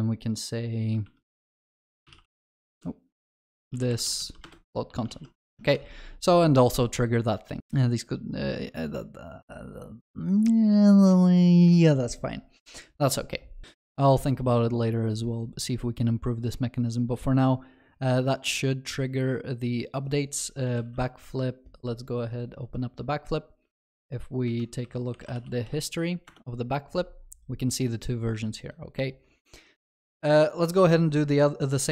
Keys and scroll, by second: 2.7 ctrl+BackSpace, 4.5 Return, 5.2 ctrl+s, 5.4 ctrl+alt+shift+l, 5.7 ctrl+s.